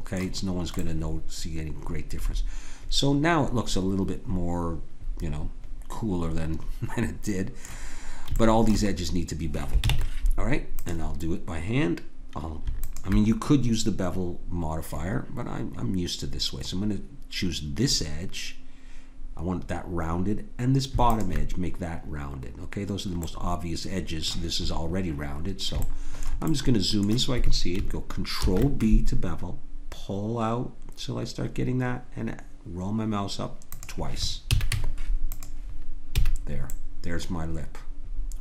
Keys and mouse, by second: 8.4-9.9 drag, 9.9 ctrl+Tab, 12.8-16.1 drag, 21.1 click, 23.0 middle click, 28.4 ctrl+b, 34.4 a, 34.7 Tab, 36.1 a, 36.4-37.9 drag.